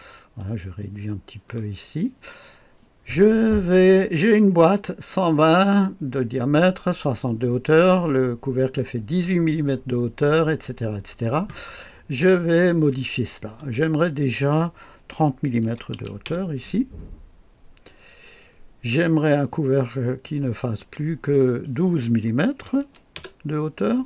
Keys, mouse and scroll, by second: 0.4-1.9 right drag, 13.6 click, 15.6 KP_3, 16.0 KP_0, 16.2 Return, 20.8 click, 22.5 KP_1, 22.8 KP_2, 23.2 Return.